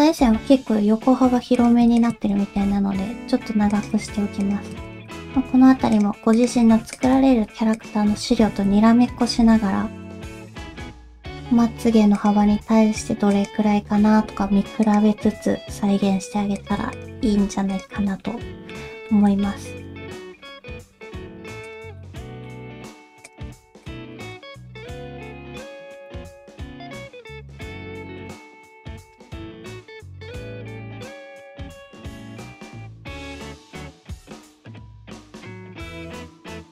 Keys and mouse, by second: 0.2 l, 1.5 click, 2.0 shift+click, 2.5 g, 4.4 click, 4.8 shift+click, 5.2 g, 6.3 click, 6.9 shift+click, 8.5 alt+a, 9.3-12.4 typing, 14.2 g, 16.9 shift+click, 17.2 g, 18.3 middle click, 19.2 middle click, 22.1 middle click, 23.2 click, 23.8 shift+click, 24.1 shift+middle click, 24.4 middle click, 25.6 middle click, 26.7 g, 28.9 middle click, 29.8-33.8 middle drag.